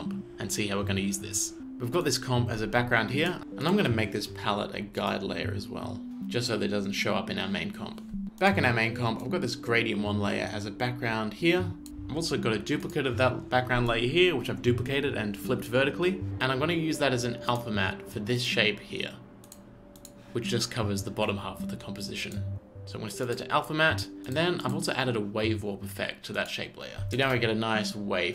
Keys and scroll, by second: 27.2 space.